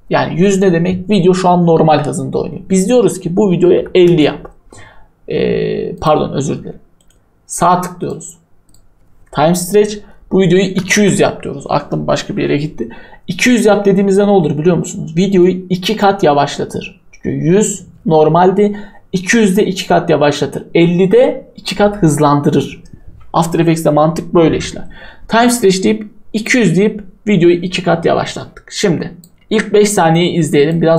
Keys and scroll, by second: 3.8 typing, 10.4-11.1 typing.